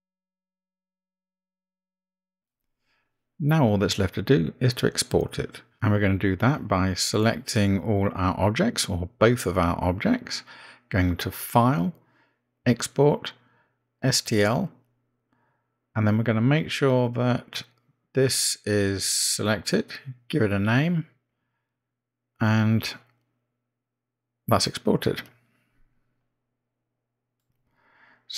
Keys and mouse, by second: 1.6-2.0 middle drag, 2.3 click, 2.8-3.6 middle drag, 8.2 click, 11.7-14.9 drag.